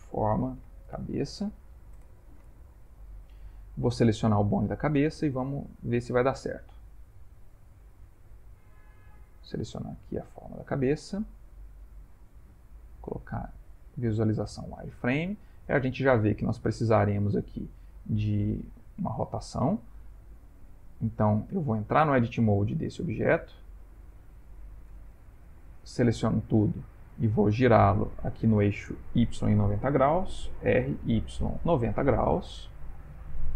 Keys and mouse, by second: 3.1 ctrl+middle click, 4.0 middle click, 5.3 click, 7.3 click, 8.7 click, 11.2 ctrl+middle click, 13.2 click, 14.4 shift+middle click, 15.2 middle click, 19.0 middle click, 19.8 middle click, 20.8 Tab, 21.7 Tab, 22.2 click, 24.9 Tab, 25.9 a, 30.6 r.